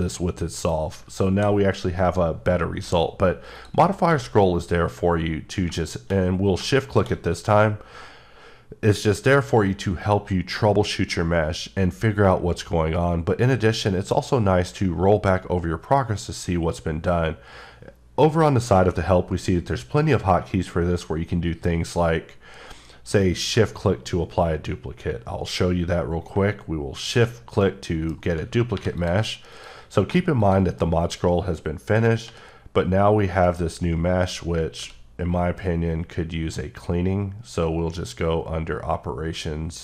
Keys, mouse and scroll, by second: 1.3 h, 3.6 click, 4.1 q, 6.8 shift+click, 7.6-8.8 scroll up 5, 9.0-9.6 scroll down 3, 9.6-10.2 scroll up 4, 10.7-11.0 scroll up 1, 11.0-11.8 scroll down 5, 12.1-12.9 scroll up 6, 12.9-13.5 scroll down 5, 13.5-14.2 scroll up 6, 14.2-15.0 scroll down 3, 15.0-16.5 scroll up 6, 16.5-16.8 scroll down 2, 17.2-18.1 scroll up 1, 21.8-22.7 scroll down 4, 22.7-23.2 scroll up 1, 23.2 scroll up 1, 27.0 shift+click, 27.6 middle click, 28.7 3, 29.0 click, 32.3 i, 33.4 right click, 34.8 q.